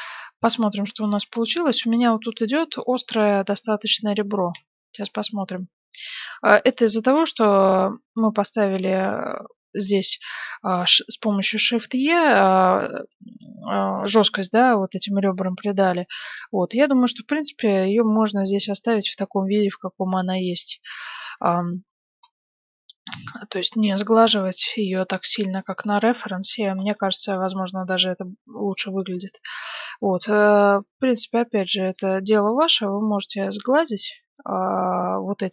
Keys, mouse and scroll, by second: 0.4-3.3 middle drag, 4.5 z, 5.0-7.5 middle drag, 7.9-9.6 middle drag, 9.8 middle click, 10.1 Tab, 10.6-12.4 right drag, 14.9-16.7 middle drag, 19.4 KP_1, 20.0-21.5 middle drag, 21.4 z, 22.3-24.0 middle drag, 25.1-29.2 middle drag, 25.1-25.7 scroll down 1, 26.9-27.2 scroll up 1, 29.2 a, 29.5 b, 30.5-32.2 drag, 31.4 a, 31.6 b, 33.3 click, 33.6 a, 33.7 b.